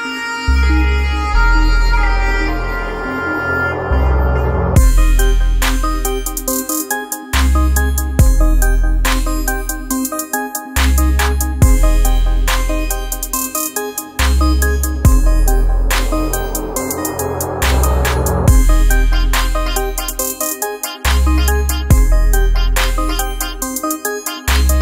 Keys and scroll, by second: 0.8 typing, 1.9-12.0 typing, 13.2 BackSpace, 14.8 ..